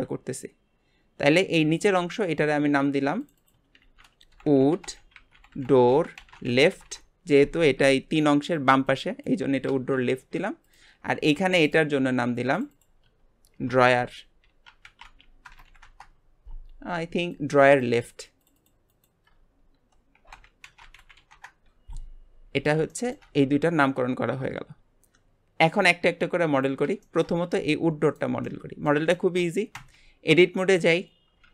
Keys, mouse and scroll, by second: 1.8-3.3 drag, 3.3-4.4 drag, 4.4 o, 5.5 o, 10.2 scroll up 2, 10.6 click, 11.1 g, 12.5-15.9 drag, 17.3 click, 17.7 click, 18.0 click, 18.4 click, 18.6-21.7 drag, 22.9-26.0 shift+middle drag, 26.1 scroll up 2, 26.5 click, 27.0 shift+middle click, 27.5 g, 28.4-29.7 middle drag, 29.7 Tab, 30.2 scroll up 2, 30.8 click.